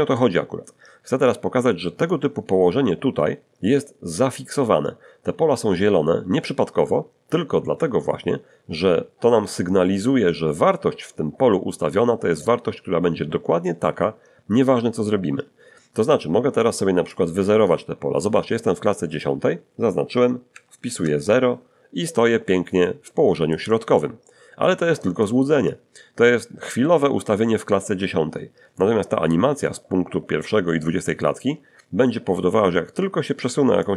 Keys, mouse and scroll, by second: 2.3-17.1 scroll down 1, 17.1 click, 20.5 0, 20.9 Return, 22.8-24.2 middle drag, 33.8-33.9 drag.